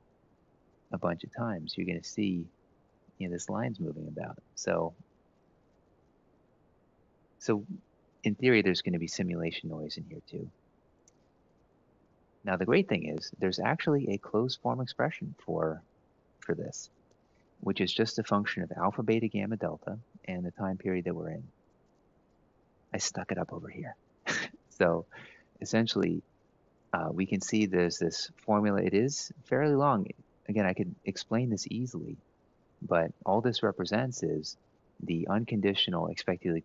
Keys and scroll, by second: 1.2 F9, 1.9 F9, 2.5 F9, 3.0 F9, 3.4 F9, 3.6 F9, 3.9 F9, 4.1 F9, 4.4 F9, 4.6 F9, 4.9 F9, 5.1 F9, 5.3 F9, 5.5 F9, 9.0 F9, 11.7 ctrl+Up, 15.6 shift+Down, 15.8 shift+Down, 15.9 shift+Down, 16.1 shift+Down, 32.6 F2.